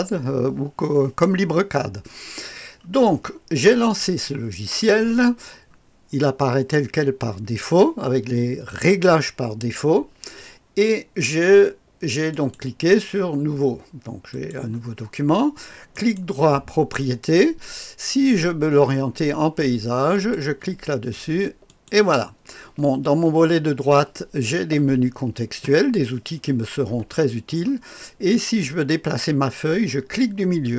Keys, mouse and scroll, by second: 12.3 click, 14.3-15.3 drag, 15.9 right click, 17.0 click, 17.7 click, 20.1 click, 21.6-22.6 drag, 30.2-30.7 middle drag.